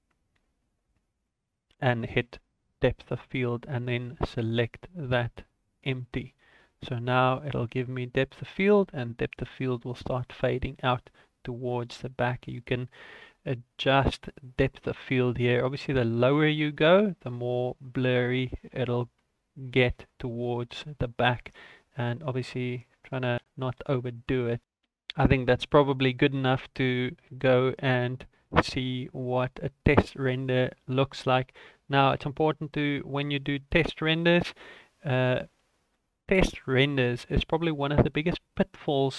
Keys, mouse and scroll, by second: 0.3-1.3 scroll down 14, 1.8 click, 3.5 click, 16.2 click, 22.0 click, 24.6 shift+middle click, 30.2 ctrl+s, 38.3-39.1 scroll up 6.